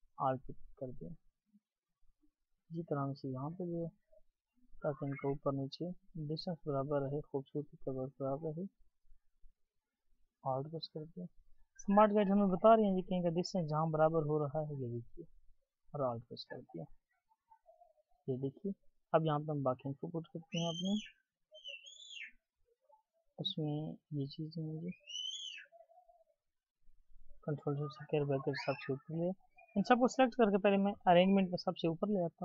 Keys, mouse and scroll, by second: 0.0-10.1 scroll, 11.1-15.6 scroll down 1, 16.7-17.9 alt+scroll down 1, 17.9-18.3 scroll up 1, 18.5-19.3 alt+scroll down 1, 19.3-19.8 scroll down 1, 19.9-22.1 ctrl+scroll down 1, 22.2-27.5 alt+scroll down 2, 28.0 ctrl+shift+], 29.5 double click.